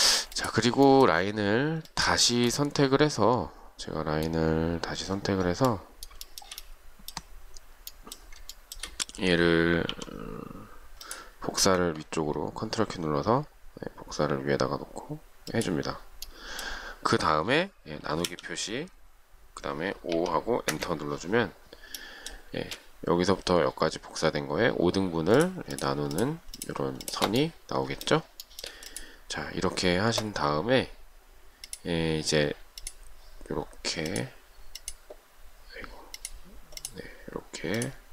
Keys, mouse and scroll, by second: 2.0 shift+click, 6.5 shift+middle click, 8.8 shift+middle click, 10.1 m, 18.5 /, 20.3 5, 20.9 Return, 22.8 space, 25.9 shift+click, 26.1 shift+double click, 26.4 shift+click, 26.9 shift+double click, 27.3 shift+click, 28.7 shift+middle click, 32.9 shift+click, 34.2 shift+click, 34.9 shift+click, 36.4 shift+click.